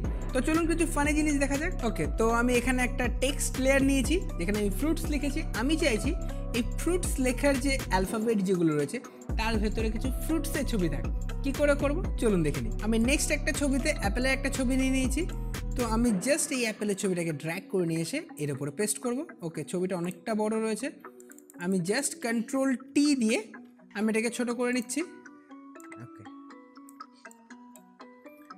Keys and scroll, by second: 0.3 ctrl+alt+z, 23.2 ctrl+t.